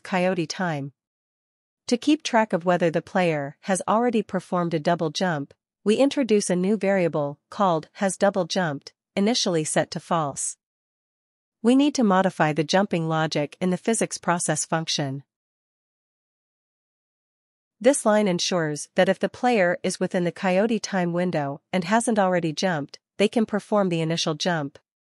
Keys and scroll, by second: 4.7-10.5 typing, 11.6 ctrl+s, 15.5 ctrl+x, 15.9-17.9 typing, 16.4 Right, 16.6 Return, 18.0 ctrl+v, 19.0 BackSpace, 19.3 Right, 20.1 Caps_Lock, 20.8 Tab.